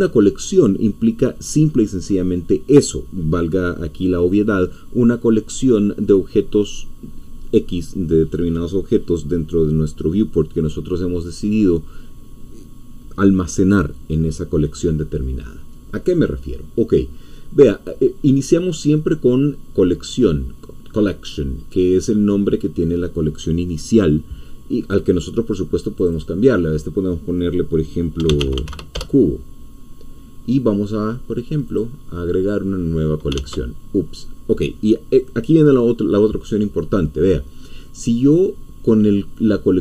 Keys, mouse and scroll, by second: 1.1-2.1 scroll down 1, 2.1-5.7 scroll up 2, 5.7-16.9 scroll up 1, 16.9-18.5 middle drag, 26.1-28.2 drag, 28.0-29.0 typing, 31.7-33.3 drag, 33.4 ctrl+z.